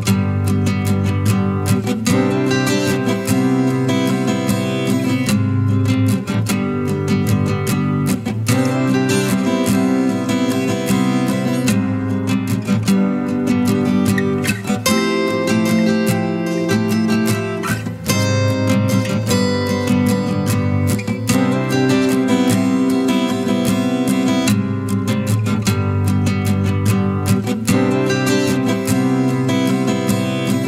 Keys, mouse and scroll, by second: 7.9 shift+click, 11.1 shift+click, 13.1 shift+click, 17.0 shift+click, 18.2 shift+click, 20.2 shift+click, 28.3 ctrl+=, 28.5 ctrl+=, 28.6 ctrl+=, 29.0 space.